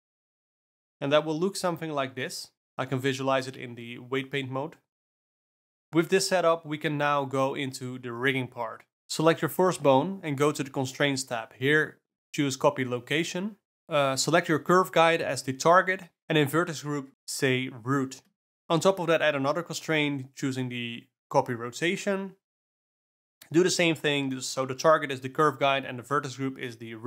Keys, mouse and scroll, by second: 0.2 click, 0.6 click, 1.0 Tab, 3.6 Up, 3.8 Up, 4.3 Down, 4.4 Down, 4.8 Up, 5.0 Up, 5.0 click, 11.0 alt+a, 11.7 click, 12.5-15.6 drag, 15.9 click, 17.2-19.0 drag, 20.6 click.